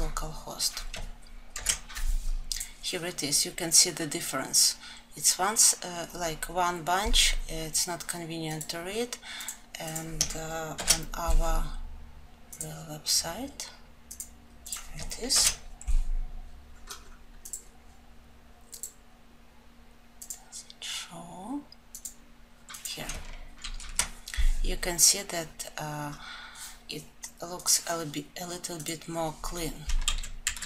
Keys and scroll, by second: 29.4 ctrl+z.